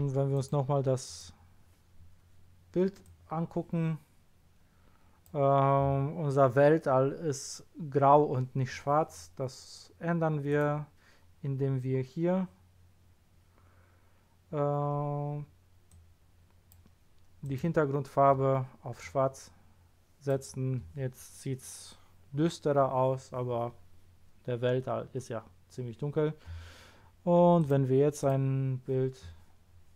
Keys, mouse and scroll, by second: 0.3 click, 1.0 click, 3.0-4.3 drag, 10.5 click, 15.9 click, 17.4 click, 19.0-20.2 drag, 27.6 click, 28.2 click.